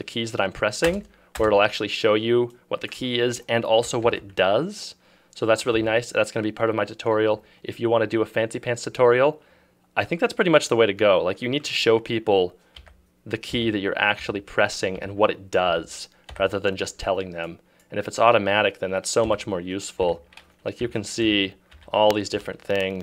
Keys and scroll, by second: 0.9 space, 4.1 ctrl+e, 5.9 Escape, 12.8 `, 14.3 `, 16.5 `, 19.3-22.4 typing.